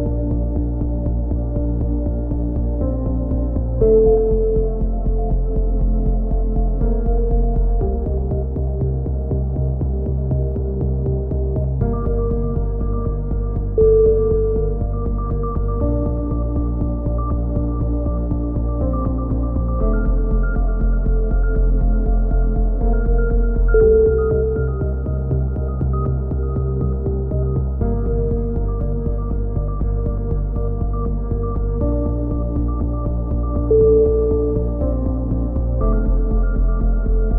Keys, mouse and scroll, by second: 2.5 KP_3, 2.7 z, 3.1 z, 3.4 z, 4.3-6.6 middle drag, 6.6 z, 7.1 click, 7.3-8.6 middle drag, 8.0 a, 8.6-9.6 drag, 10.0 middle click, 10.2-11.2 drag, 13.1 click, 13.3-14.3 middle drag, 14.3 right click, 15.5 a, 16.5-17.5 right drag, 17.5 middle click, 17.8 click, 18.6-20.2 drag, 19.2 right click, 20.0 x, 21.9-22.9 right drag, 22.9 middle click, 23.7 KP_3, 23.8 z, 26.3 middle click, 32.2 a, 33.1 click, 34.1-35.7 middle drag, 34.5 c, 35.7 click, 36.6 right click, 37.0 g.